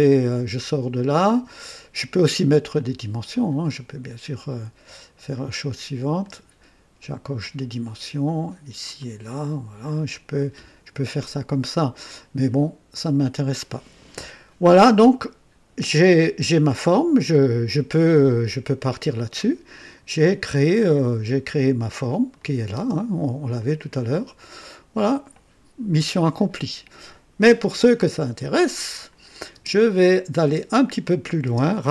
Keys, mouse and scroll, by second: 0.4 Escape, 3.2 click, 4.5 Escape, 5.3 click, 6.2 click, 7.3 click, 8.9 click, 9.8 click, 12.9 click, 22.3 click, 22.7 space, 23.5-29.2 drag, 29.5 space, 30.3 space, 31.4 space.